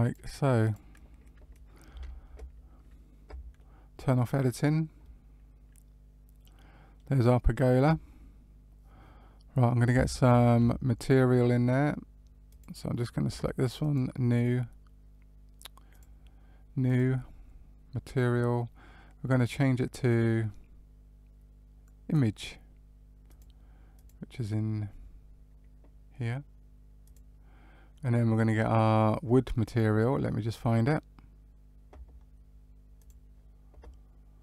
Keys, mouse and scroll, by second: 0.6 click, 1.8 Tab, 3.5 middle click, 5.1 middle click, 10.1 shift+middle click, 12.4 click, 13.7 click, 15.9 click, 16.8 click, 19.2 click, 23.9 click, 31.4 click, 33.8 click.